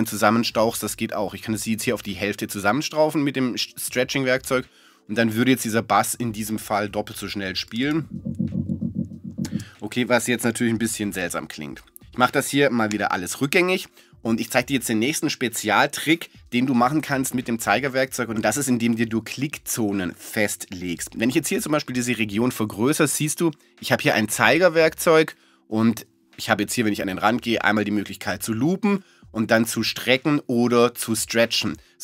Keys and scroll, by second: 10.7 space.